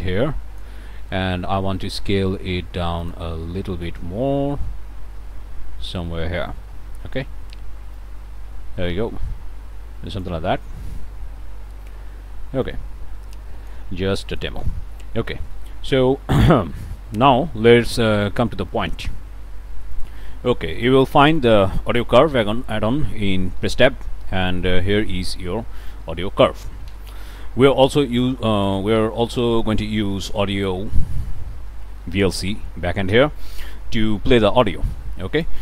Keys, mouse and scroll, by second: 3.0 click, 4.3-5.0 scroll down 4, 5.0-6.1 scroll up 1, 6.1-8.0 scroll up 1, 8.0-10.4 drag, 11.0-12.6 scroll up 1, 12.6-13.9 drag, 13.9 scroll up 1, 14.3 click, 15.0 click, 15.4 click, 16.4 click, 16.8 click, 17.1 click, 17.5 middle click, 18.0 click, 18.5 scroll down 2, 18.8 click, 20.0 click, 20.9 click, 21.3 click, 23.6 Tab, 24.6-25.5 typing, 26.1 Down, 26.9 Return, 27.9 click, 28.7 click, 30.2 Tab, 31.2-32.5 typing, 32.6 Down, 33.1 Return, 34.0-34.4 scroll down 2, 34.6-35.6 drag.